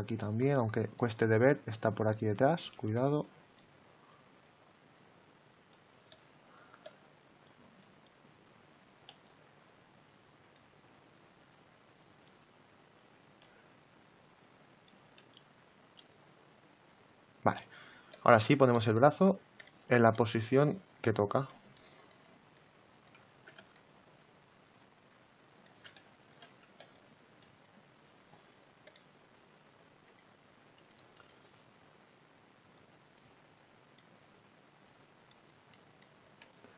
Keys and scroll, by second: 2.7 ctrl+z, 21.0 x, 23.3 ctrl+z.